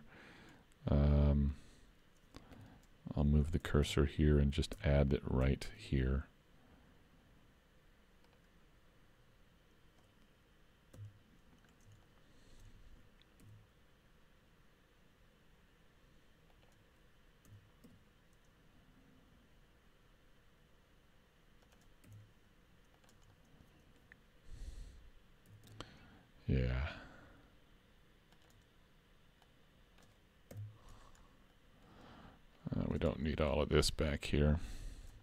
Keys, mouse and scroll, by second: 0.6 middle click, 0.8 shift+middle click, 2.6 2, 2.7 click, 3.6 shift+s, 4.8 Tab, 5.7 shift+a, 11.0 KP_3, 11.7-12.1 scroll up 4, 12.1 shift+middle click, 13.4 s, 17.5 s, 22.1 s, 23.3 middle click, 25.5 s, 29.5 click, 30.6 KP_Decimal, 31.2-32.5 scroll down 3, 31.6 middle click, 32.6 click, 33.2 middle click, 34.2 shift+middle click.